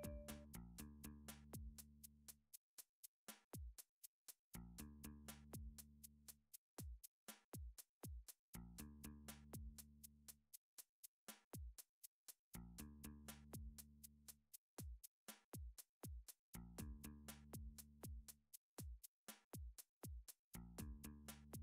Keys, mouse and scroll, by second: 0.0 shift+click, 0.1 f, 0.7 middle click, 2.7 middle click, 3.2 click, 4.2 middle click, 4.7 g, 6.0 y, 6.9 click, 7.5 middle click, 9.6 middle click, 9.7-10.2 scroll up 4, 10.4 shift+middle click, 10.7 middle click, 11.7 click, 11.7 shift+middle click, 12.4 g, 12.6 y, 14.0 right click, 14.3 click, 14.3 g, 15.3 g, 15.6 y, 21.2 click.